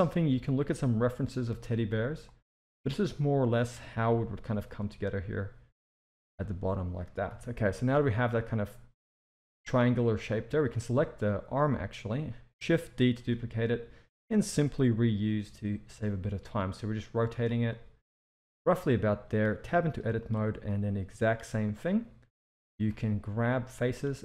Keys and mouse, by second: 3.0-3.5 drag, 3.8 s, 6.4 Tab, 7.3 KP_1, 7.7 z, 10.6 click, 13.2 shift+d, 14.8 r, 17.7-18.1 shift+middle drag, 19.0 shift+middle drag, 19.6 Tab, 19.9 z, 20.7-21.2 drag, 21.6 r, 22.7 s.